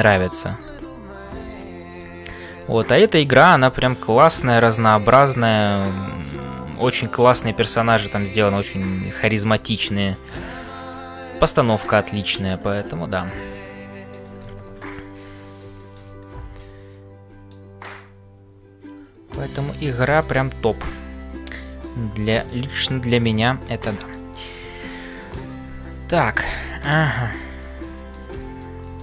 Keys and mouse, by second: 0.0-29.0 typing, 1.6 middle click, 2.7 middle click, 4.6 middle click, 6.9 middle click, 10.9-13.3 middle drag, 13.5 middle click, 14.8 ctrl+s, 15.8 shift+middle click, 20.0 shift+middle click, 20.9 middle click, 22.2 shift+middle click, 22.7-24.3 middle drag, 24.7 shift+middle click, 25.4-27.5 middle drag, 27.9 shift+middle click, 28.4-29.0 middle drag.